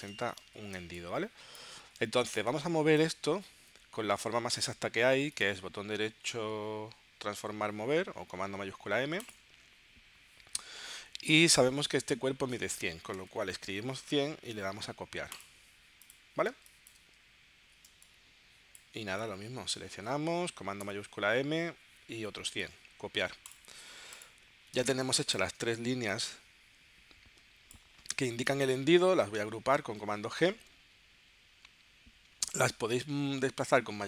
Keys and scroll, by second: 0.7 space, 12.8-13.6 typing, 16.5 space, 17.9 space, 20.8 shift+super+m, 24.8 space, 29.7 super+g.